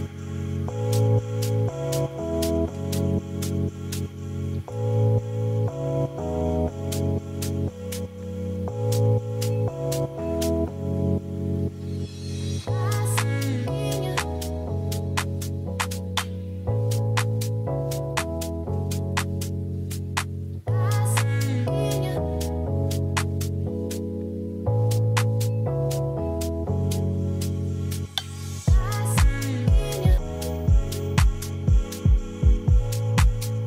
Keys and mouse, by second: 0.1 f, 0.2-0.5 middle drag, 1.1 Tab, 1.4-2.9 right drag, 3.2 ctrl+s, 3.5-3.9 drag, 5.1 middle drag, 5.8 shift+middle click, 6.7 click, 9.2 shift+middle click, 9.9 middle click, 10.7 KP_Divide, 11.9-13.7 drag, 14.3 click, 14.8 click, 15.6 click, 15.7 click, 15.9 click, 16.8-17.5 right drag, 18.5 click, 24.9 click, 26.1 click, 26.6 middle click, 27.8-28.6 drag, 30.9 middle drag, 32.8 drag.